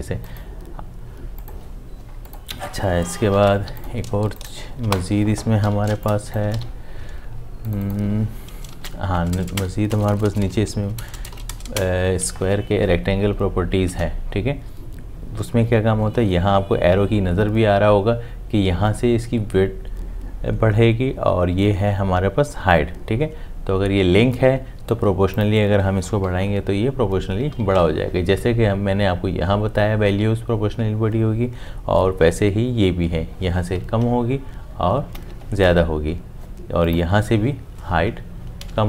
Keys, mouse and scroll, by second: 3.1 Escape, 3.5 v, 4.8 Delete, 5.6 m, 6.5 shift+v, 8.7 0, 9.9-12.0 typing, 13.9 Tab, 26.2 Up, 34.0 Down, 37.8 Up.